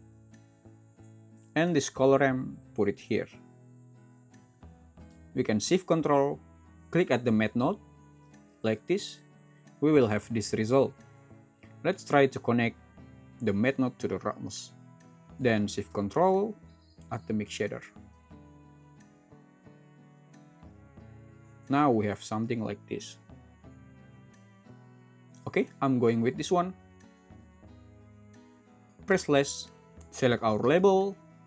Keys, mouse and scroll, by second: 30.0 click, 30.9 Escape.